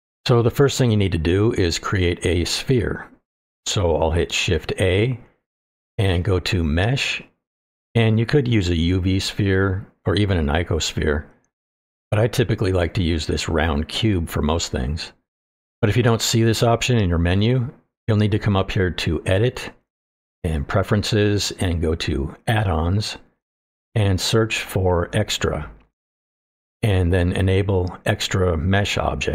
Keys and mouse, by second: 4.3 shift+a, 20.3-21.6 drag.